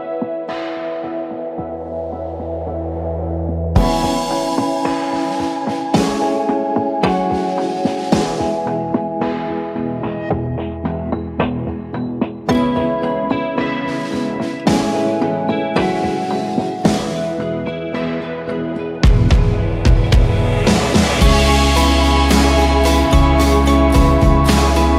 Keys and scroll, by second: 0.2-1.2 typing, 8.1 alt+Return, 9.6 ctrl+z, 10.3-11.6 typing, 14.5 ctrl+z, 14.8 ctrl+z, 18.9 ctrl+s, 19.7 ctrl+w, 20.3 v, 22.3 8, 23.1 ctrl+s, 23.3 ctrl+w, 24.0 v.